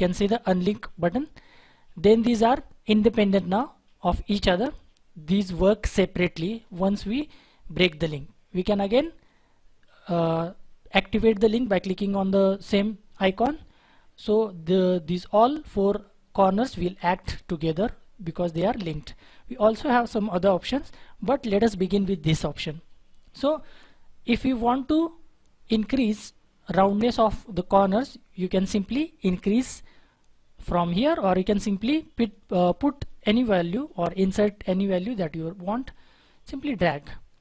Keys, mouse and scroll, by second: 32.4 double click.